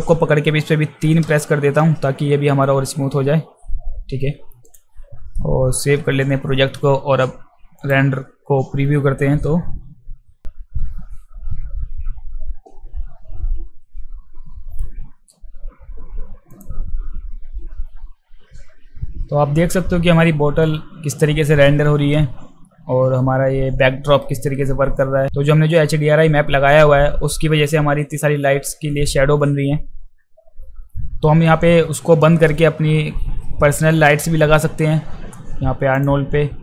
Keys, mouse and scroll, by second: 1.2 3, 4.7 click, 5.8 ctrl+s, 7.8 click, 16.5 click, 35.9 click.